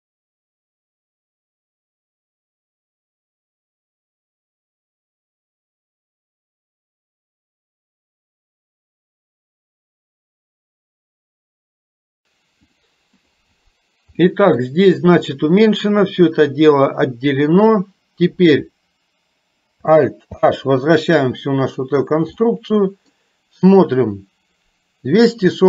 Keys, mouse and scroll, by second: 0.1 click, 0.7 middle click, 1.0 click, 1.7 click, 2.0 a, 2.3 click, 3.0 middle click, 3.4 click, 3.8 click, 4.3 a, 4.6 click, 5.2 click, 6.1 click, 6.4 a, 6.6 click, 7.2 middle click, 7.5 click, 8.1 click, 8.5 a, 8.8 click, 9.9 click, 10.5 click, 11.1 a, 11.3 click, 12.1 middle click, 12.9 click, 14.2 middle click, 20.4 alt+h, 22.5 middle click.